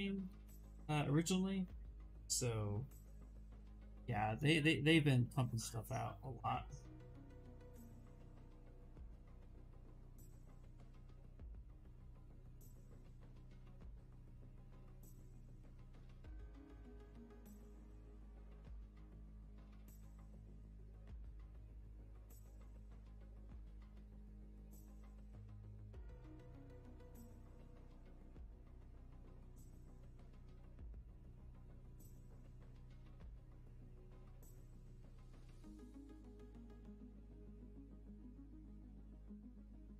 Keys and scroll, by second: 1.9 space, 3.2 s, 6.0 ctrl+z, 26.3 s, 29.1 ctrl+z, 35.5 shift+f, 37.4 ctrl+z, 39.3 w.